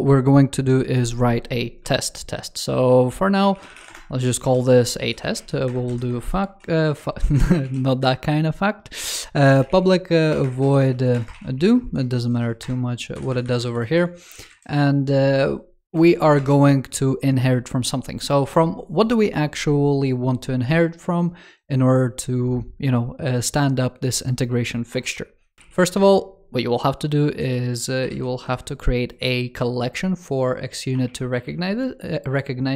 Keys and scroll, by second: 14.4 super+Right.